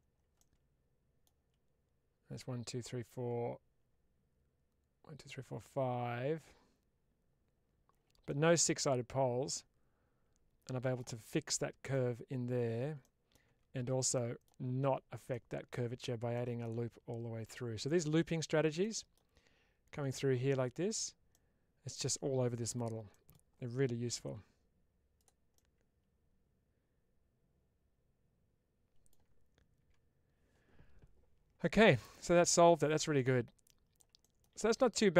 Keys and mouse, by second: 0.3 middle click, 8.1-10.8 middle drag, 11.4-11.8 middle drag, 12.9 middle click, 14.0 middle click, 15.2 middle click, 16.2 middle click, 17.4 middle click, 18.7 middle click, 21.2 middle click, 23.0 middle click, 25.1 click, 25.4-28.9 middle drag, 32.0-32.5 middle drag, 33.0-33.8 middle drag, 34.4-35.1 middle drag.